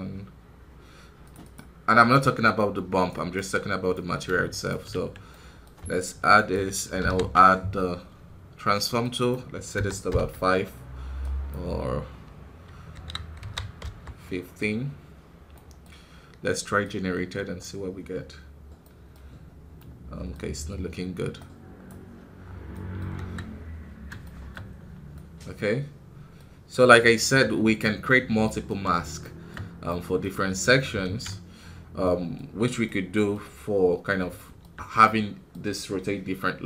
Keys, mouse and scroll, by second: 3.0-4.7 right drag, 4.7-6.4 ctrl+shift+drag, 6.4 right click, 6.9 ctrl+t, 10.0-14.6 drag, 14.6 scroll up 4, 17.5-18.7 drag, 18.7 middle click, 19.1 scroll up 2, 19.7-21.8 middle drag, 21.8 click, 22.3 scroll down 5, 22.6 middle click, 22.9 scroll up 1, 23.1 KP_1, 23.5 scroll up 1, 24.1 shift+middle click, 24.7 scroll down 1, 25.0-26.4 middle drag, 26.4-28.1 scroll up 1, 28.3 middle click, 28.7 scroll up 2, 29.1-31.5 shift+middle drag, 31.5 scroll down 4, 31.9 middle click, 32.3-32.8 scroll up 3, 32.8 middle click, 33.4 scroll up 2, 34.3-36.4 shift+middle drag, 36.4-36.6 scroll down 1.